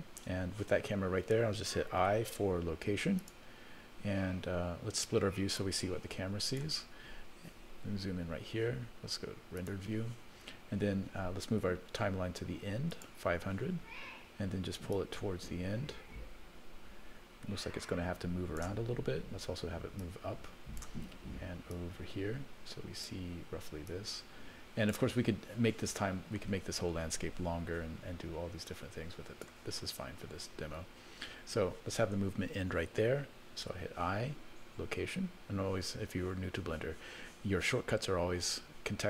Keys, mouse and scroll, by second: 2.0 i, 5.6-6.6 drag, 7.8 KP_0, 9.6 click, 12.9 click, 14.9-18.6 drag, 20.0 click, 21.7-23.1 drag, 23.9-24.9 drag, 28.7 click.